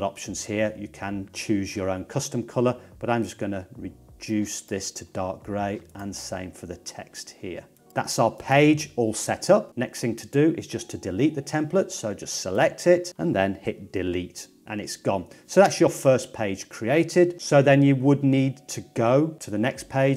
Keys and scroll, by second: 13.2 BackSpace.